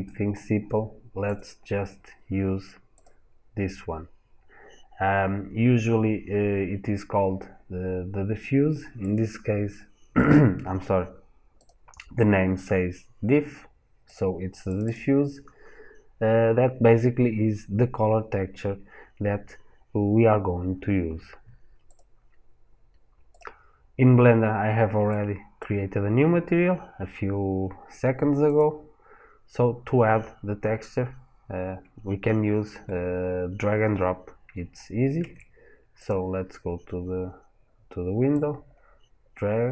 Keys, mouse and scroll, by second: 23.2 click.